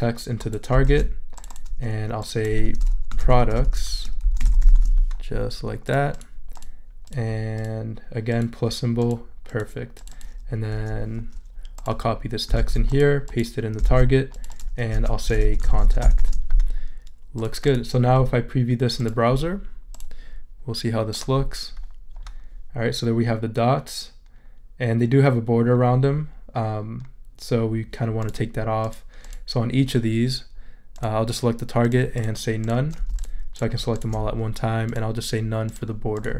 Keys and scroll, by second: 0.8 super+v, 2.9-5.2 typing, 12.6 super+c, 13.8 super+v, 14.9 super+a, 15.4-16.7 typing.